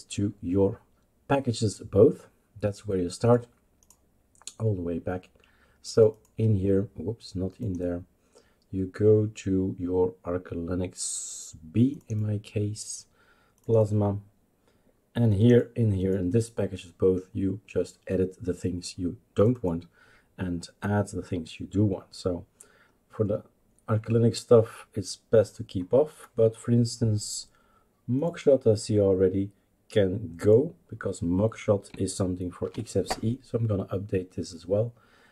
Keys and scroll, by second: 32.6 #.